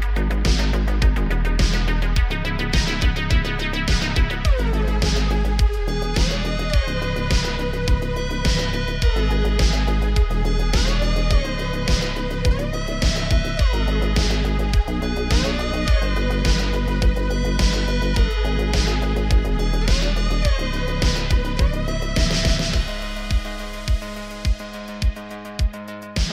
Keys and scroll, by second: 0.5 ctrl+r, 1.2 g, 1.4 z, 2.1 Tab, 2.7 Tab, 2.9 g, 3.0 z, 3.4 Tab, 18.4 g, 23.4 Tab, 23.6 2, 24.3 1, 24.8 shift+s, 25.1 Tab.